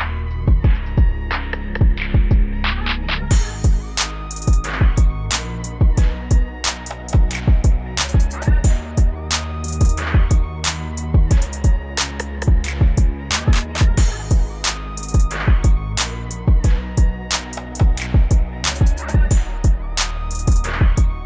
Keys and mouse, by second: 0.6 KP_8, 0.9 KP_8, 1.6 KP_2, 1.8 KP_2, 3.3 KP_8, 4.8 KP_Subtract, 5.0 KP_Subtract, 6.0 KP_2, 6.9 KP_4, 7.2 KP_4, 8.3 KP_6.